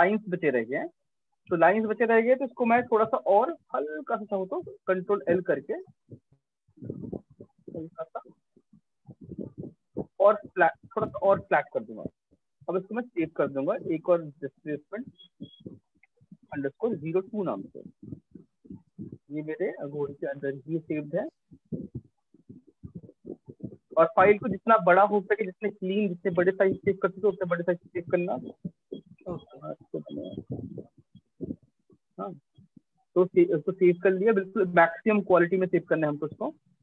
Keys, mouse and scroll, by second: 0.0 ctrl+space, 0.1 ctrl+space, 0.5 ctrl+click, 0.7 ctrl+space, 2.5 ctrl+i, 4.3 click, 5.9 click, 7.4 click, 9.1 click, 10.2 click, 11.8 ctrl+shift+s, 14.6 click, 15.4 Right, 15.8-16.6 typing, 20.9 click, 23.0 click, 28.2 click, 28.6 ctrl+alt+i, 31.6 click, 32.0 click, 33.1 click, 36.2 click, 36.6 shift+click, 36.7 shift+click.